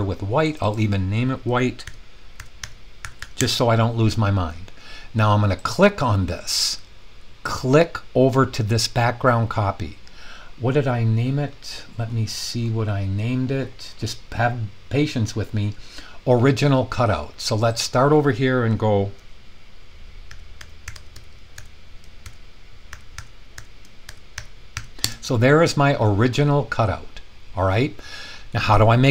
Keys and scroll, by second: 1.6-3.7 typing, 19.2-25.2 typing, 27.3 typing.